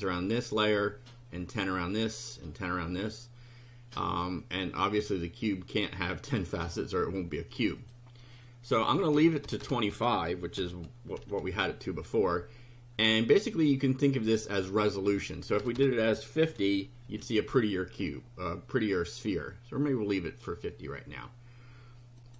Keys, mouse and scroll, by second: 7.8 click, 9.0 Left, 9.4 BackSpace, 9.9 2, 10.7 5, 11.1 F5, 15.6 BackSpace, 16.5 KP_5, 16.5 KP_0, 17.1 F5, 22.2 click.